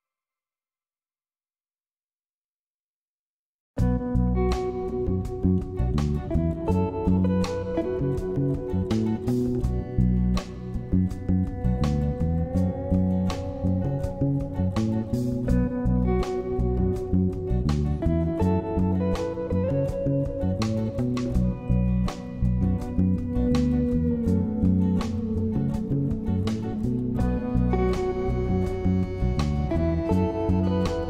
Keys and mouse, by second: 0.6 ctrl+z, 0.6 click, 1.2 ctrl+z, 1.5 click, 2.6 ], 2.9 [, 2.9 click, 3.8 ], 4.0 ], 4.3 ctrl+z, 4.4 click, 5.0 click, 5.3 click, 6.2 click, 7.4 click, 7.8 click, 11.2 click, 11.7-13.1 typing, 11.8 click, 12.2 click, 12.8 ctrl+z, 13.1 click, 13.7 click, 14.3 click, 14.3 [, 15.3 ctrl+z, 16.2 [, 16.2 [, 16.3 click, 16.6 ctrl+z, 16.8 click, 16.8 ], 17.2 [, 17.6 click, 18.1 ctrl+z, 18.2 click, 18.6 [, 18.7 click, 19.1 ctrl+z, 19.1 ], 19.2 click, 19.7 [, 19.9 click, 20.3 click, 20.7 ctrl+z, 20.7 ], 20.8 ], 21.2 ctrl+z, 21.2 [, 21.3 [, 21.4 click, 22.7 click, 22.7 ], 23.0 ctrl+z, 23.0 ], 23.2 click, 23.8 [, 23.9 click, 25.9-27.1 typing, 26.0 click, 26.3 ctrl+z, 26.5 click, 26.8 ctrl+z, 27.1 middle click, 29.7-30.7 middle drag.